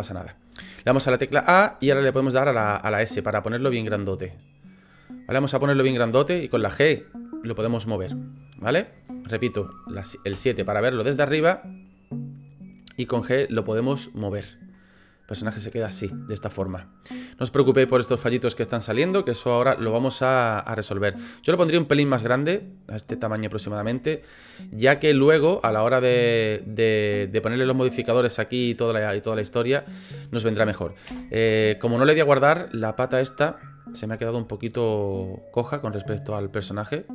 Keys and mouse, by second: 0.9 a, 1.8 s, 6.1 g, 10.3 KP_7, 13.0 g, 14.7-17.2 drag, 19.5 middle click, 21.4 middle click, 23.8 d, 24.9 a, 25.3 s, 27.9 middle click, 31.0 KP_7, 32.7 click, 34.1 g.